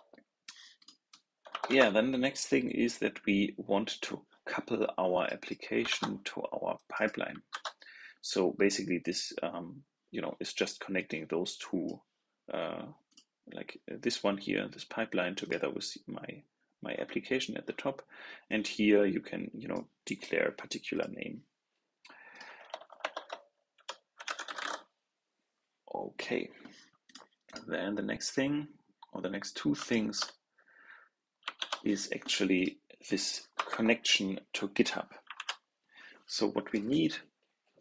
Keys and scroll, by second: 1.6 super+v, 5.8 super+c, 7.4 super+v, 31.5 super+c, 35.2 super+v.